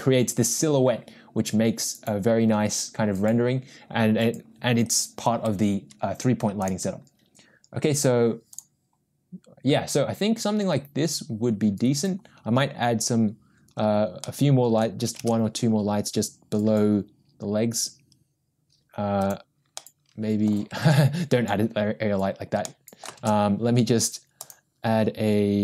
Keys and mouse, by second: 6.6 click, 8.5 click, 14.4-15.1 middle drag, 15.6 shift+a, 20.3 middle click, 22.0 ctrl+z, 23.0 middle click, 23.2 shift+a.